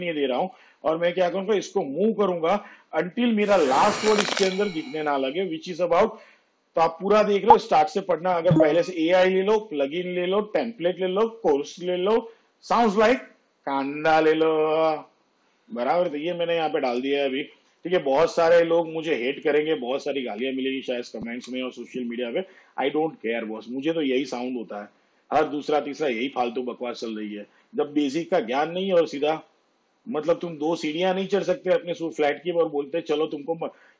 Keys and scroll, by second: 20.5 Right, 21.5 Left.